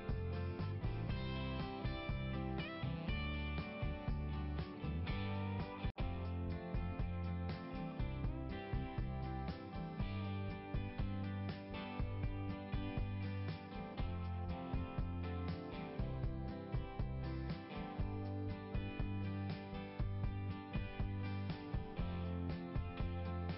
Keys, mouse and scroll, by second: 0.9 click, 1.7 click, 3.7 click, 4.2 click, 5.9 scroll up 1, 9.3-9.7 scroll up 2, 11.8 scroll up 1, 12.4 scroll up 1, 14.6 right click, 15.8 click, 16.9 right click, 19.2 click, 19.4 click, 22.0 click, 22.1 click.